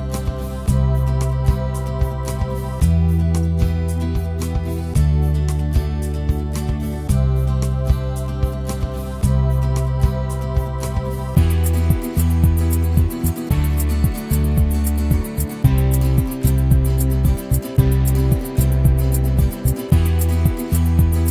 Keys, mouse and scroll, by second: 0.8 alt+middle click, 1.0 alt+click, 1.5 ctrl+right click, 2.2 alt+click, 3.0 alt+middle click, 3.4 f, 3.6-4.6 drag, 7.3 click, 8.1 ctrl+z, 8.7-10.1 drag, 10.1 ctrl+z, 10.4 click, 11.0 ctrl+z, 11.4-13.0 shift+right drag, 13.0 alt+middle click, 13.9 click, 14.6 ctrl+z, 20.4 scroll up 2, 20.9 alt+middle click.